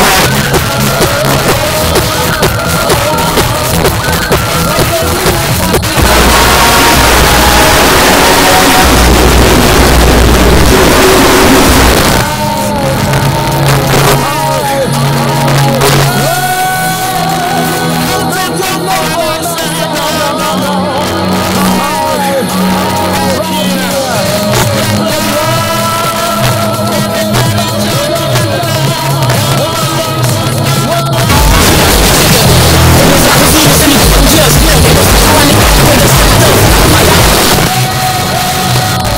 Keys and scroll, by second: 0.1 Page_Down, 11.9 Page_Down, 37.4 Page_Down.